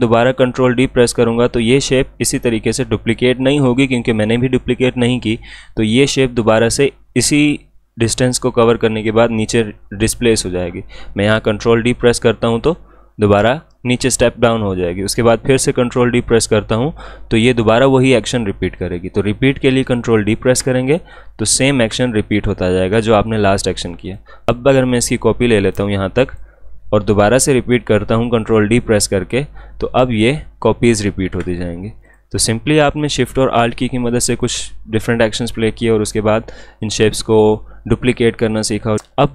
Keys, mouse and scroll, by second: 11.1 ctrl+Num_Lock, 11.8 ctrl+d, 15.8 ctrl+d, 17.0 ctrl+d, 20.2 ctrl+d, 24.0-29.3 drag, 29.3 ctrl+d, 32.0 click, 34.3-38.5 drag, 39.0-39.3 drag.